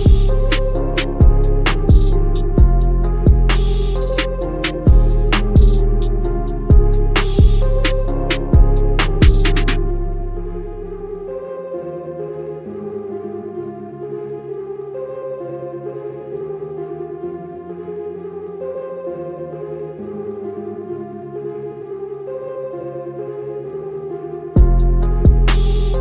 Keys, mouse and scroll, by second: 2.5-3.1 drag, 7.4 click, 24.0 scroll down 1, 24.7 click.